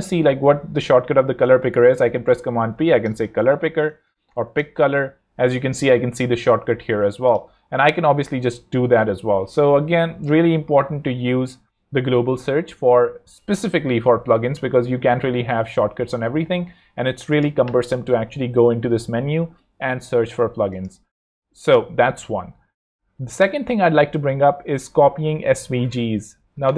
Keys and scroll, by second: 1.6 shift+super+p, 2.5 super+p, 2.5-5.6 typing, 9.2 Escape.